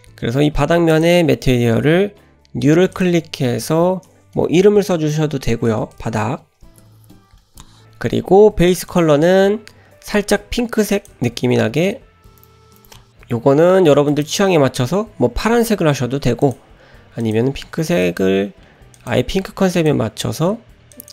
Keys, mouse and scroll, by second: 0.9 click, 2.9-7.4 drag, 8.9 click, 16.4 click.